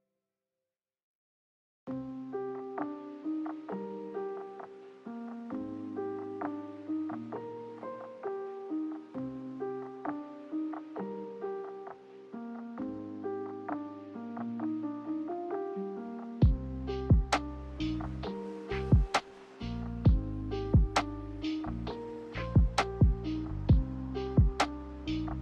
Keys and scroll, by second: 4.3 z, 6.5 g, 8.4 z, 10.5-11.5 typing, 12.8 Delete, 13.2-14.0 typing, 21.7 Delete, 22.3 Delete.